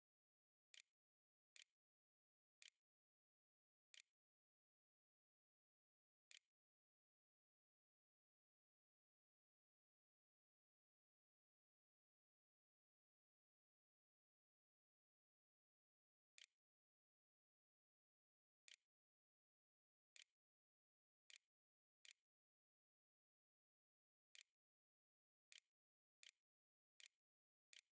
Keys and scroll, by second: 0.8-3.4 typing, 4.6-7.2 typing, 13.9-14.9 typing, 15.9-27.9 typing.